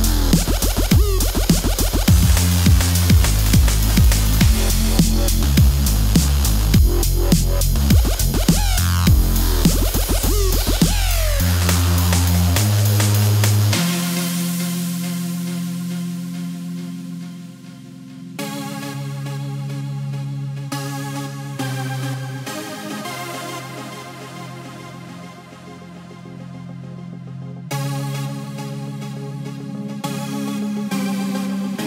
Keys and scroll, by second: 0.0 Return, 0.3 super+Tab, 1.4 ⟲, 2.1 super+=, 3.2 s, 5.8 s, 6.5 v, 7.1 super+s, 7.5 u, 7.9 super+s, 12.4 c, 12.9 super+z, 13.5 super+z, 13.8-14.7 typing, 15.8 super+z, 16.2 c, 17.4 c, 20.1 KP_0, 20.4 KP_0, 20.9 space, 21.8 super+s, 21.9 super+Tab, 22.2 super+s, 22.7-24.3 typing, 27.2 1, 27.3 Home, 30.2 typing, 30.3 Delete, 30.3 Home, 31.2 super+=.